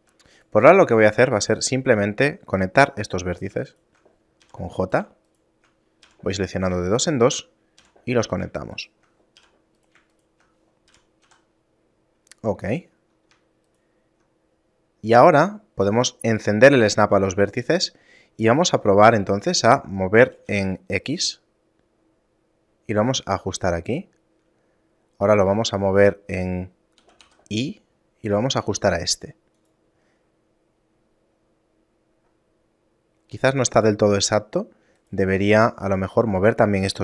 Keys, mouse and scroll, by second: 0.4 right click, 1.1 shift+right click, 2.8 j, 3.4 right click, 3.7 shift+right click, 4.5 j, 4.9 right click, 5.3 shift+right click, 6.1 j, 6.6 right click, 7.1 shift+right click, 7.9 j, 8.3 right click, 8.8 shift+right click, 9.5 j, 9.9 right click, 10.2 shift+right click, 11.0 j, 11.3 a, 11.9 middle click, 13.7 alt+right click, 14.8 scroll up 1, 16.4 click, 18.3-19.6 scroll up 3, 20.4 g, 23.6 middle click, 24.0-24.7 scroll down 2, 24.7 middle click, 27.0 g, 30.4 middle click, 31.4 scroll up 2, 32.2-33.0 scroll up 1, 33.0 middle click, 33.7 scroll up 1, 34.0 middle click, 34.4-35.0 scroll down 1, 35.0 right click, 35.6 middle click.